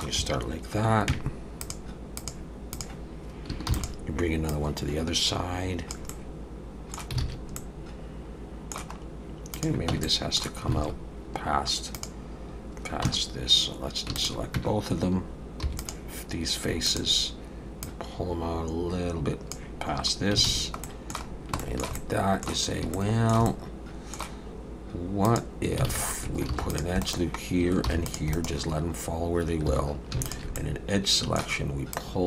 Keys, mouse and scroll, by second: 1.6 click, 3.7 shift+d, 4.5 click, 6.1 middle click, 7.2 alt+a, 7.6 middle click, 9.0 scroll up 1, 9.5 click, 9.9 Tab, 10.1 middle click, 10.8 alt+a, 11.9 click, 13.1 Tab, 14.2 shift+click, 14.6 Tab, 15.7 3, 15.8 click, 16.9 shift+click, 17.8 click, 20.5 alt+a, 20.8 middle click, 21.3 scroll down 1, 21.6 shift+middle click, 22.0 middle click, 22.9 shift+middle click, 23.5 middle click, 25.3 click, 25.9 alt+a, 26.5 ctrl+r, 27.9 ctrl+r, 29.7 2, 30.3 alt+shift+click, 30.6 middle click, 31.9 click.